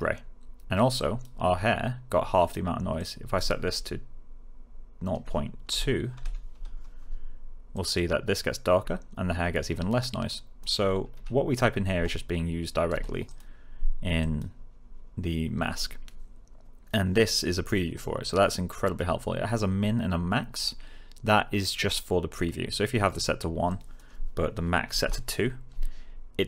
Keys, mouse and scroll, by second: 0.9 click, 2.9-3.5 click, 5.6-7.0 typing, 7.7 click, 10.2 click, 11.1 1, 11.9 Return, 13.2 click, 23.6 click, 24.8 2, 24.9 Return.